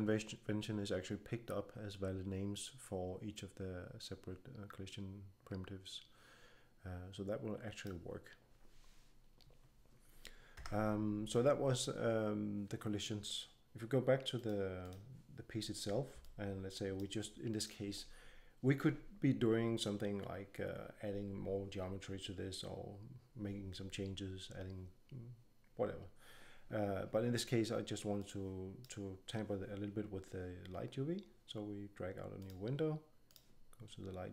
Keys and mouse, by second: 3.9-10.5 drag, 10.5 Tab, 14.3-24.2 drag, 28.1-30.0 drag, 32.3-34.3 drag.